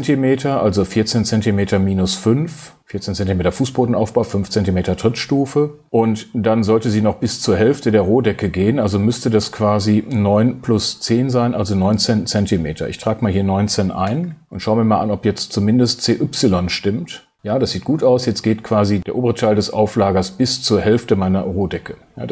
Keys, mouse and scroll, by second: 13.6 click, 14.0 BackSpace.